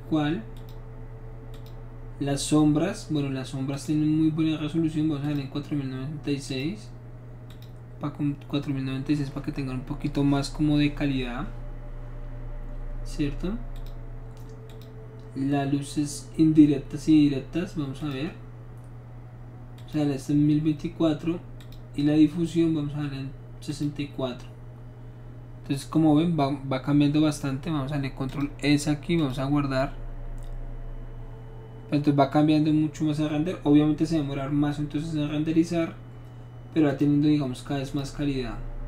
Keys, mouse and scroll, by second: 0.6 click, 1.5 click, 3.7 click, 5.2 click, 6.5 click, 7.5 click, 13.8 click, 14.7 click, 18.0 click, 19.8 click, 21.6 click, 23.7 click, 28.3 click, 29.2 click, 36.9 click, 37.9 click.